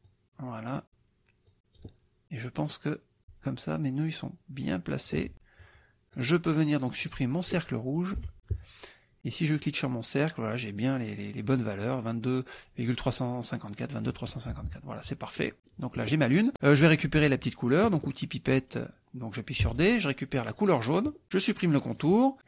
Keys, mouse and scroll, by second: 0.1 click, 1.6 click, 2.8 click, 3.9-5.3 drag, 6.2 click, 7.1 click, 8.2 Delete, 9.7 click, 14.5 KP_Subtract, 15.4 click, 19.7 d, 20.5 click, 21.9 click.